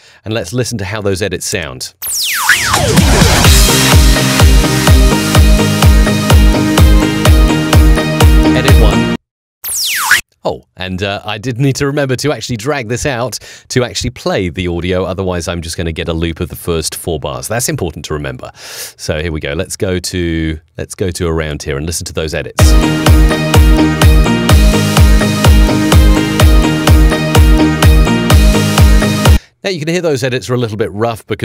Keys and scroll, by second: 1.4 space, 10.0 space, 22.4 space, 29.1 space.